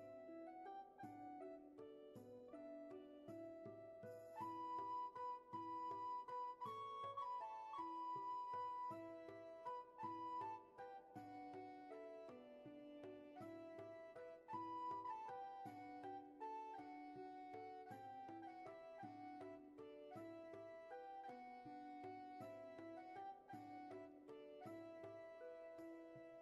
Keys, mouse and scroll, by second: 5.4 ctrl+z, 10.2 ctrl+z, 11.9 ctrl+z, 17.0 ctrl+z, 21.5 ctrl+z, 25.4 ctrl+z.